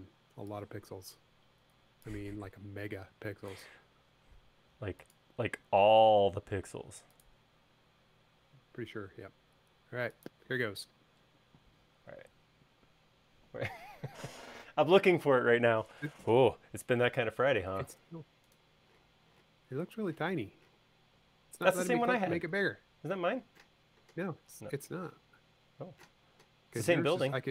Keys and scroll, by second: 11.4 space.